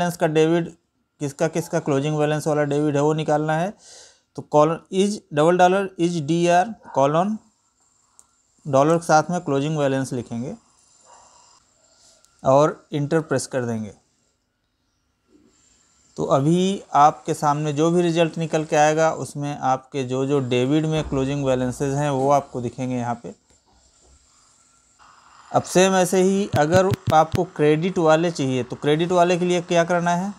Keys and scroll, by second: 23.1 Down, 29.6 Up, 30.2 Right.